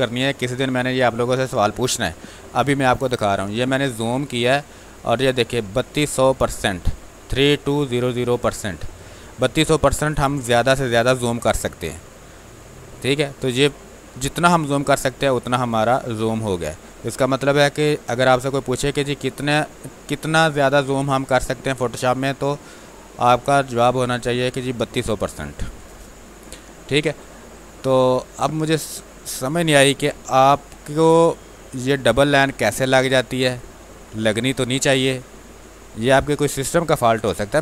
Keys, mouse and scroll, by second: 22.7 ctrl+4, 24.7-28.8 alt+drag, 28.8 ctrl+click, 29.9 v, 32.7-37.6 drag.